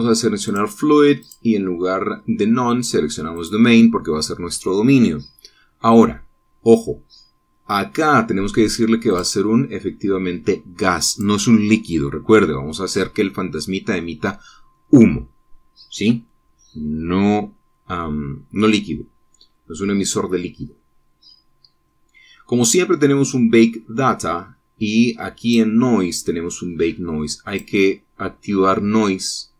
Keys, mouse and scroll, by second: 1.3 click, 2.1 click, 4.2 click, 10.0 click, 12.0 click, 13.6 middle click, 21.2-23.2 scroll down 4, 23.2 scroll up 2, 24.9-26.3 scroll down 2, 26.3 click, 26.9-28.1 scroll down 1, 28.4 click.